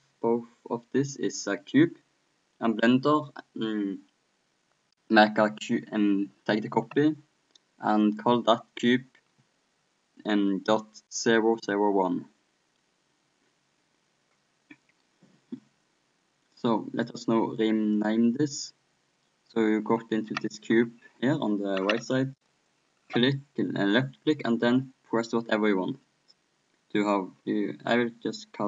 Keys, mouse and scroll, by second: 17.9-19.8 drag, 22.6-24.3 drag.